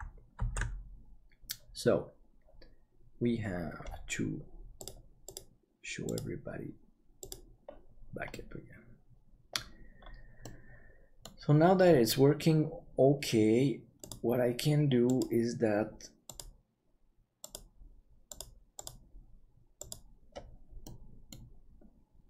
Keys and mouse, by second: 0.5 ctrl+s, 8.3-9.5 middle drag, 10.4 middle click, 20.9 middle click.